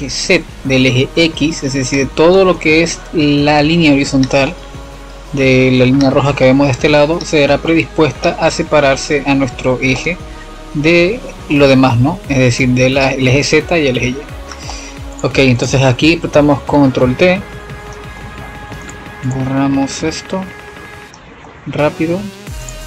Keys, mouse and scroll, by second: 1.9 click, 2.5 shift+a, 7.4-8.9 middle drag, 8.9-12.6 drag, 13.5 middle click, 13.6 F7, 14.7-17.8 middle drag, 18.1-22.8 middle drag.